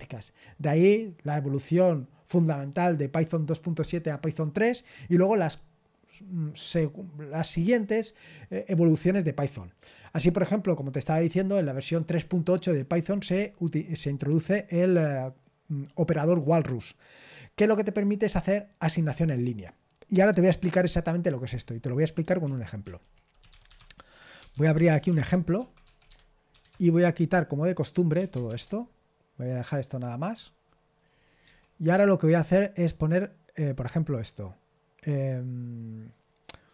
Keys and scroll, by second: 22.4 super+l, 22.8 super+l, 23.1-26.7 typing.